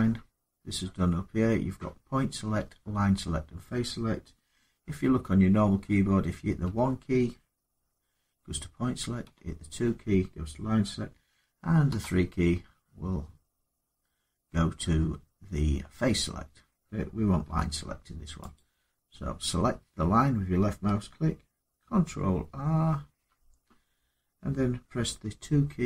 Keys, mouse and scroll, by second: 6.4 1, 9.0 2, 11.7 3, 17.2 2, 18.3 click, 22.7 ctrl+r, 25.6 2.